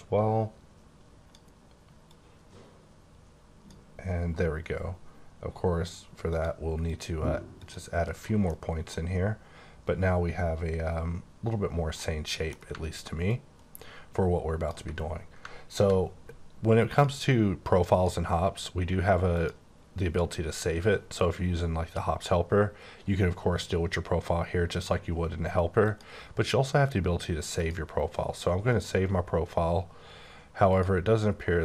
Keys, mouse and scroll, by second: 2.0 click, 6.3 click, 6.8 click, 7.5 click, 8.4 middle click, 12.0 middle click, 13.2 ctrl+click, 17.8 click, 19.3 click, 25.8 click, 27.5 click, 30.7 click.